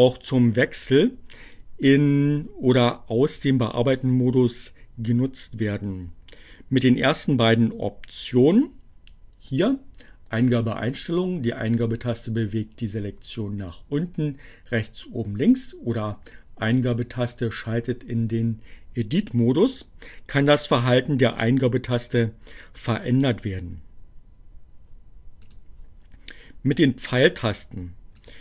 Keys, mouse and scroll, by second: 13.6 click, 14.6 click, 24.1 click, 26.2-28.4 drag.